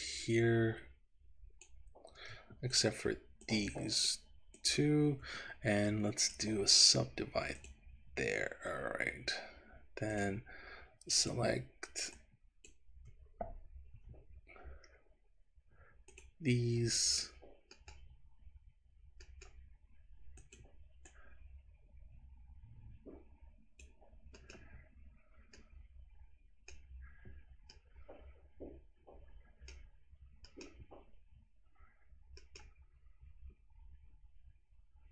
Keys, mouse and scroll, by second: 2.7 shift+click, 3.5 shift+click, 4.0 shift+click, 4.7 shift+click, 6.3-7.9 right drag, 10.1 click, 11.2 shift+click, 12.2 shift+click, 13.9 c, 17.8 middle click, 19.2 middle click, 20.4 click, 21.2 click, 24.4 middle click, 25.6 middle click, 30.4 middle click, 32.4 middle click, 33.6-35.1 scroll up 1.